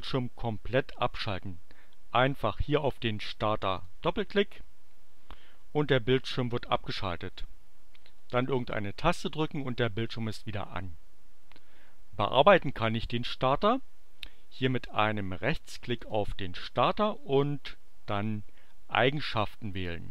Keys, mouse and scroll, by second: 3.6 click, 8.5 space, 16.0 right click, 18.1 click.